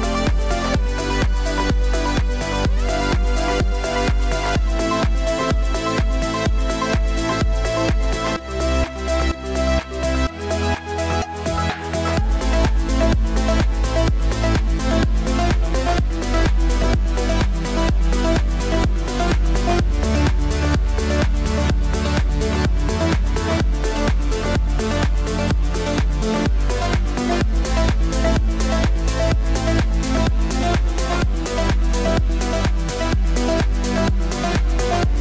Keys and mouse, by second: 1.8 x, 3.9 Return, 9.9-10.8 drag, 12.9 click, 15.3 click, 26.9 click, 28.5 KP_2, 28.7 KP_8, 29.5 Return, 31.2 click, 32.4 KP_Subtract, 32.6 KP_Subtract, 32.8 KP_Subtract, 33.0 KP_Subtract, 33.2 KP_Subtract.